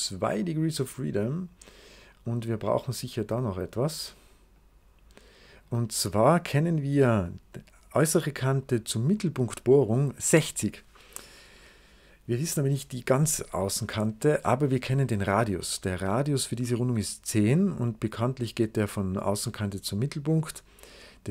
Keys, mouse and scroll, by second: 0.6-2.3 drag, 2.8 click, 4.4 click, 15.0 click.